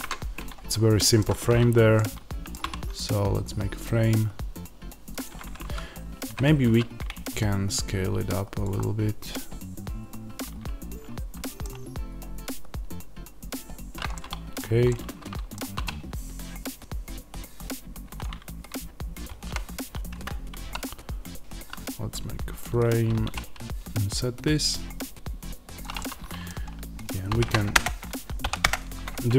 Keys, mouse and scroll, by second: 0.7-5.1 middle drag, 2.5 e, 5.1 click, 5.5 ctrl+z, 6.6 s, 8.5 click, 8.7-18.1 middle drag, 15.7 e, 18.1 click, 20.5 i, 22.8 click, 23.1 e, 25.7 click, 25.9-27.2 middle drag, 27.2 shift+d, 28.5 p, 28.6 Return, 29.2 Tab.